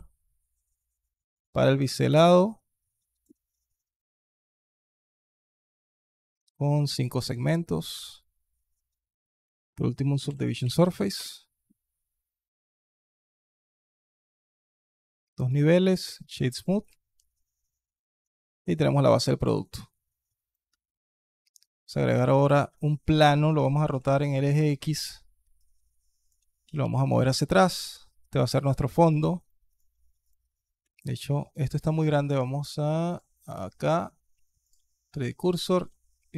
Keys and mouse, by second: 1.7-3.1 shift+drag, 4.0 click, 4.3 click, 6.1 click, 6.7 alt+click, 7.9 alt+click, 9.2-11.1 drag, 13.9 click, 15.3-15.9 drag, 16.3 alt+drag, 17.0-18.0 alt+drag, 18.5-18.9 alt+drag, 19.4-20.3 alt+drag, 20.5 alt+drag, 20.9 shift+click, 21.1 shift+a, 22.6-22.9 alt+drag, 23.4 r, 25.4-26.1 alt+drag, 26.4 g, 28.4-28.9 alt+drag, 29.5 click, 30.1-30.4 shift+drag, 30.7 shift+click, 31.7 alt+click, 33.0-34.5 drag, 35.2 alt+KP_1, 35.6 s.